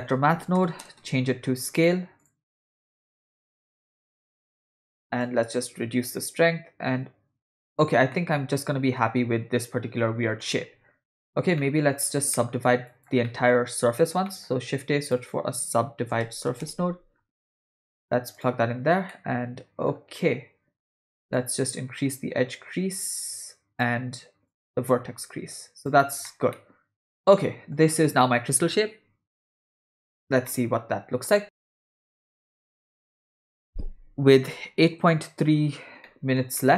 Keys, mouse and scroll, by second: 2.5 click, 2.9-4.4 drag, 5.2-7.8 shift+drag, 8.2-10.5 middle drag, 11.6 middle click, 12.4 middle click, 13.0 click, 13.2 middle click, 14.3 shift+middle click, 14.5 shift+a, 19.1 middle click, 21.4-23.8 drag, 24.5-25.9 drag, 26.3-27.8 middle drag, 30.5 middle click, 36.0 ctrl+middle click, 36.6 middle click.